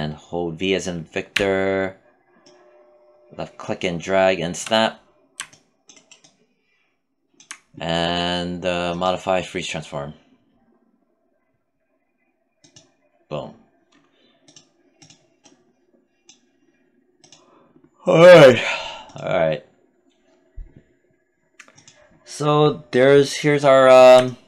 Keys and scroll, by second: 0.7 v.